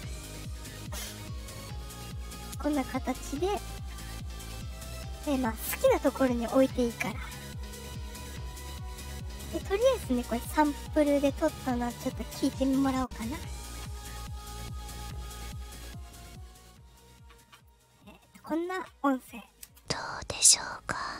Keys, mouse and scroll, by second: 3.0 click, 5.1 click, 5.6 click, 6.5 click, 7.6 click, 8.5 click, 9.3 click, 10.4-12.1 drag, 15.0 click, 18.3 click, 19.6 space.